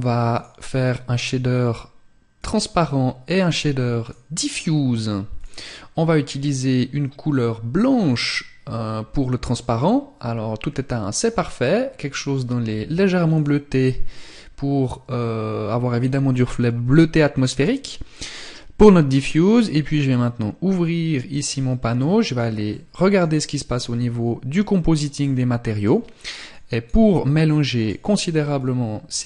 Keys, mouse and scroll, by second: 2.8 click, 7.4 click, 10.7 click, 20.3 click.